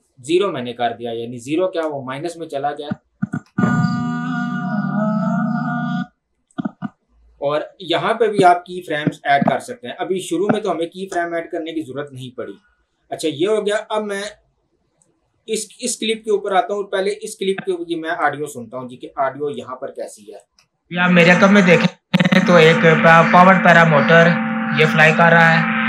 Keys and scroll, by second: 3.4 space, 5.9 space, 20.5 space.